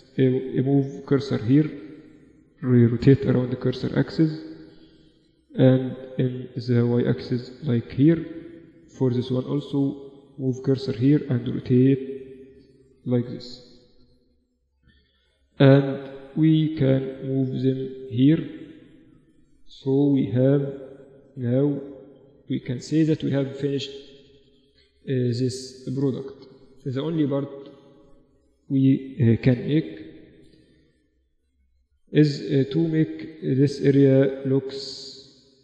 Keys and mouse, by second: 2.5 r, 5.0-6.9 drag, 8.4-9.5 right drag, 9.5 middle click, 10.0-11.4 drag, 11.2 r, 13.0 KP_4, 13.2 KP_4, 13.4 KP_4, 14.4-15.8 middle drag, 15.8-17.8 drag, 18.7-20.6 middle drag, 19.5-21.6 typing, 25.5 Tab, 26.3 Tab, 29.0 shift+b, 30.8 Tab, 32.4 ctrl+r, 34.8 a, 35.4 a.